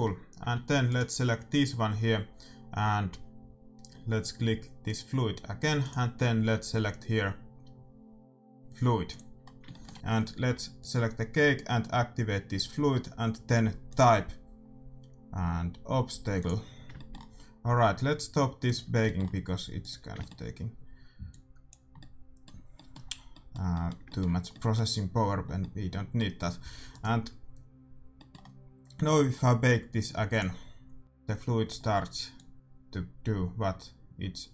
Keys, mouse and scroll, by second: 0.4 a, 0.8-2.8 right drag, 4.8-7.6 drag, 9.4 middle click, 10.5 a, 10.8-12.6 right drag, 13.9-15.5 drag, 16.7 middle click, 16.9-27.4 middle drag, 18.6-20.5 drag, 19.8-21.7 right drag, 21.2-23.3 drag, 26.6 a, 26.9-28.3 right drag, 27.8-30.2 middle drag, 30.2 click, 32.4-34.1 drag.